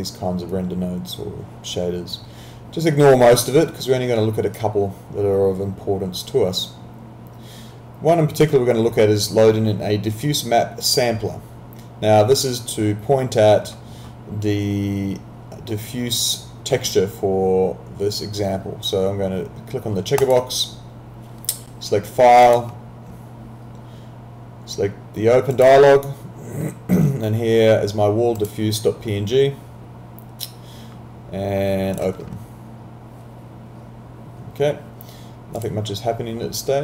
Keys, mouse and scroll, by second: 4.6 click, 20.2 click, 25.5 click, 28.4 click, 32.0 click, 35.6 click.